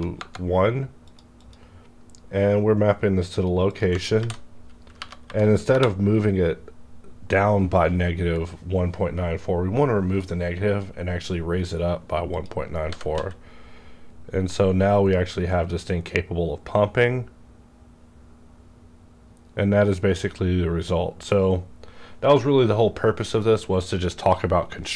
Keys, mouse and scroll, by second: 0.1 KP_Enter, 1.0 click, 1.8 scroll down 1, 3.6 click, 4.1 ctrl+v, 4.9 Home, 5.6 Return, 12.3 click, 12.8 g, 13.2 z.